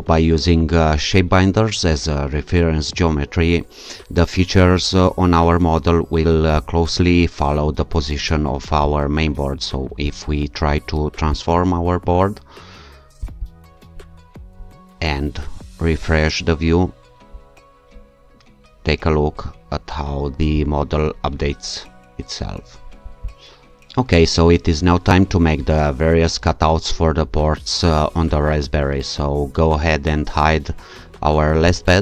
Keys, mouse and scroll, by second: 6.5 click, 8.8 click, 10.1 right click, 11.3 click, 13.2 click, 15.4 q, 19.5-20.1 alt+scroll up 2, 20.1-20.8 alt+scroll up 1, 20.8-21.5 alt+scroll down 2, 23.1 alt+click, 31.7 click.